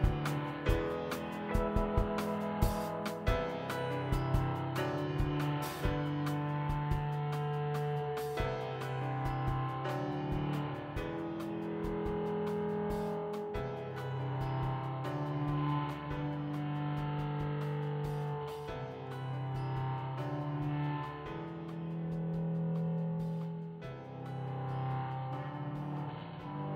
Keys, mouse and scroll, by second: 0.1-1.4 drag, 2.0 click, 3.3-5.5 drag, 9.5 click, 9.9 shift+click, 10.9 super+c, 11.0 super+v, 11.8-12.9 drag, 14.8 r, 20.3-21.3 drag, 22.0 s, 23.3 click, 24.5 KP_1, 25.4-25.8 shift+middle drag, 26.6 click.